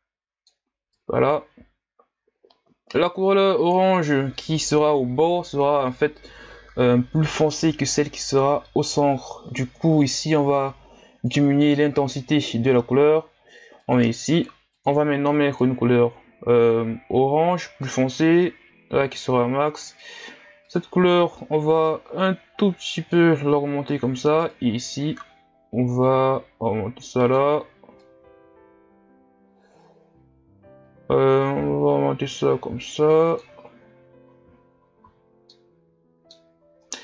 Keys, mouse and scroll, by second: 15.6 click, 33.9-35.1 scroll down 1, 35.1 a, 36.4-36.8 scroll up 3, 36.8-37.0 right drag.